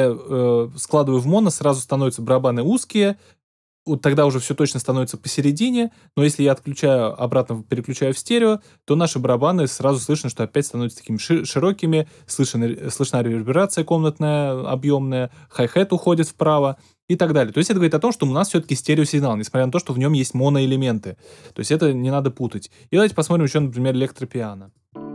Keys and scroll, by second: 24.9 space.